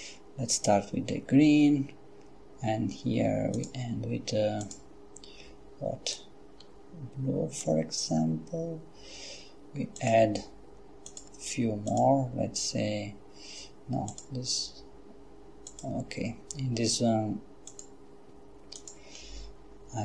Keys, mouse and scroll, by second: 3.6 click, 4.6 click, 6.2-8.2 drag, 10.0 click, 11.1 click, 11.9 click, 14.1 click, 15.7 click, 17.7 click, 18.8 click.